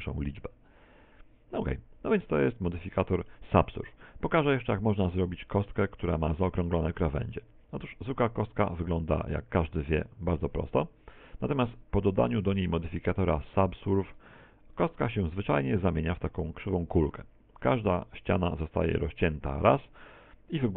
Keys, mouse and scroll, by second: 2.1-3.7 scroll down 6, 2.9 shift+middle click, 3.7 x, 4.8 shift+a, 6.5 middle click, 7.1 middle click, 7.4 Tab, 7.8 z, 8.3 Tab, 8.7 middle click, 10.1 middle click, 10.7 middle click, 11.8 middle click, 12.5 middle click, 13.5 click.